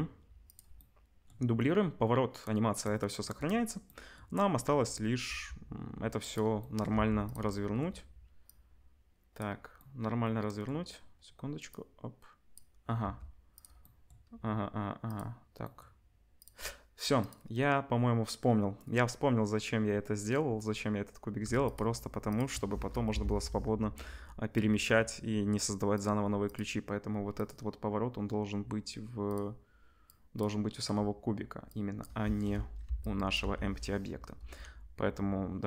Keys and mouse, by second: 5.2 r, 6.9 g, 8.4-13.6 drag, 13.0 g, 13.6-15.0 middle drag, 15.0 click, 15.1-16.3 middle drag, 16.3 click, 16.4-17.2 middle drag, 17.2 click, 17.2-21.4 middle drag, 21.6 shift+click, 22.2 shift+click, 23.1 Delete, 25.9 click, 26.4 click, 27.3 click, 29.2 click, 29.3 middle click, 30.0-35.6 drag, 32.8 Delete, 33.4 Delete.